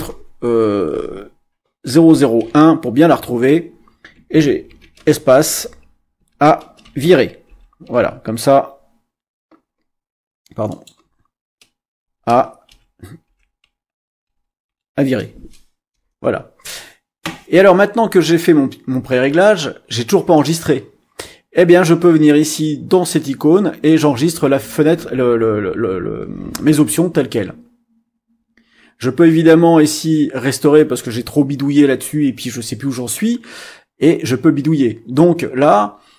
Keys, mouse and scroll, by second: 1.8 0, 2.4 1, 4.7 space, 4.8 -, 5.0 space, 6.2 Tab, 6.6-8.5 typing, 10.7 click, 12.0-14.6 typing, 15.9 Return.